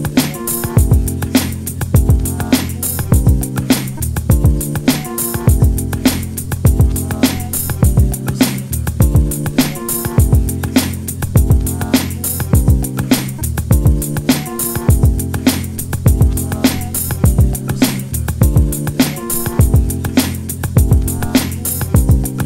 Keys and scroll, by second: 5.4-5.8 typing.